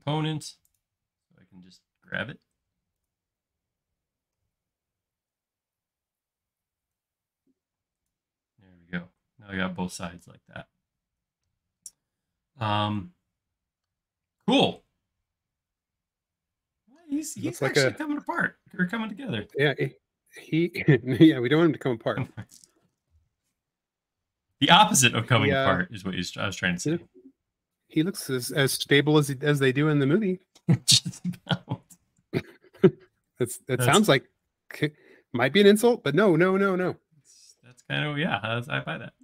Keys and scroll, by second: 7.8 space.